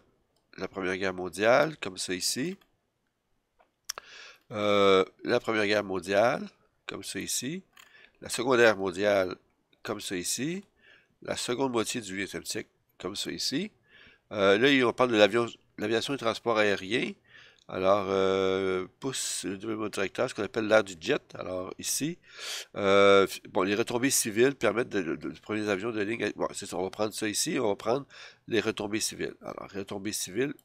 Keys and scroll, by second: 1.9 F7, 7.4 F7, 9.9 F7, 13.5 F7.